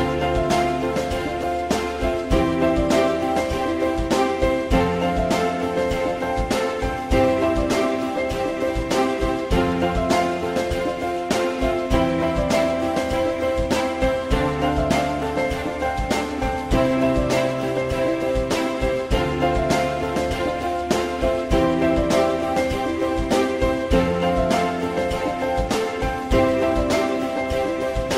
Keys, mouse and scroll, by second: 2.0 shift+click, 7.6 click, 9.1 w, 12.5 shift+click, 14.8 e, 15.4 click, 16.4-17.6 drag, 19.8 click, 21.7-23.2 drag, 24.3 click, 24.9 w, 26.3 click.